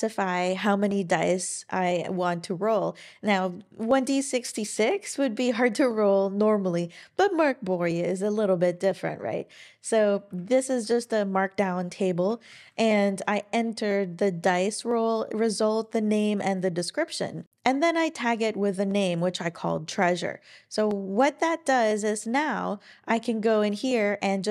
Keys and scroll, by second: 10.3 Page_Down, 10.6 Page_Down, 11.0 Down, 12.2 Right, 12.5 Right.